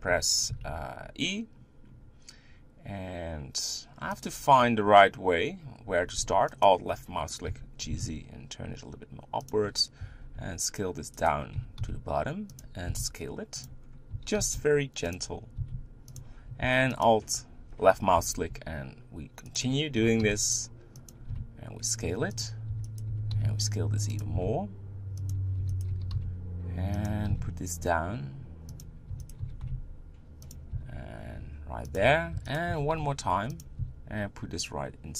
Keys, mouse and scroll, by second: 0.1 g, 6.6 alt+click, 7.5 g, 10.0 e, 11.6 g, 13.8 scroll up 2, 14.1 g, 15.6 s, 17.0 alt+click, 18.1 e, 20.0 g, 21.3 s, 22.7 e, 23.0 g, 24.3 s, 25.6 e, 25.9 g, 27.3 s, 29.1 e, 29.4 g, 30.7 s, 32.3 e, 32.6 g, 33.8 s.